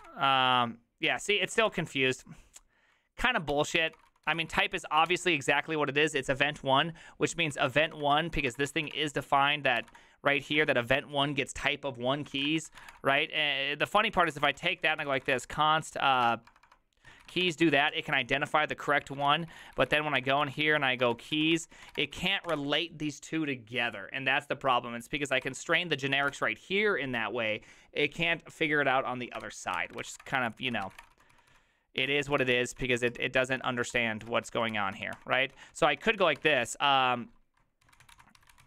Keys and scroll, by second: 0.0-0.5 typing, 1.7 ctrl+c, 1.9 u, 3.5 ctrl+r, 3.6-5.1 typing, 7.4-11.2 typing, 12.4 ctrl+c, 12.5 ctrl+^, 12.6-23.0 typing, 25.5-26.8 typing, 29.8 ctrl+c, 29.8 ctrl+d, 29.9-38.6 typing, 33.5 ctrl+u.